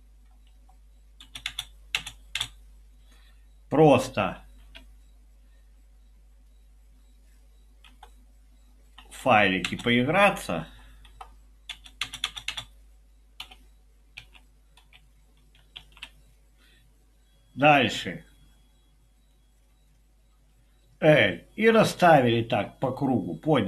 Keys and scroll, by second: 0.5 Page_Up, 0.9-2.4 typing, 4.3 typing, 7.9 Left, 8.9 Down, 9.2 Left, 9.7 space, 10.6 Up, 11.1 Up, 11.7 space, 12.0 space, 13.4 Up, 13.4-14.4 typing, 15.8 |.